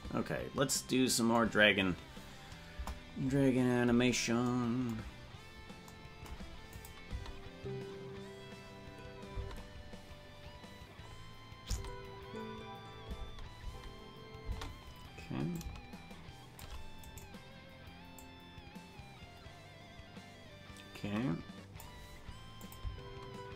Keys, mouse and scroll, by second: 2.7 KP_0, 5.2 scroll up 1, 5.9 scroll up 7, 6.8 click, 7.1 space, 11.1 scroll up 1, 11.1 space, 11.7 scroll up 4, 11.7 space, 15.6-16.7 shift+drag, 15.6 space, 17.3 right click, 18.2-21.9 drag, 22.7 click, 22.9 space.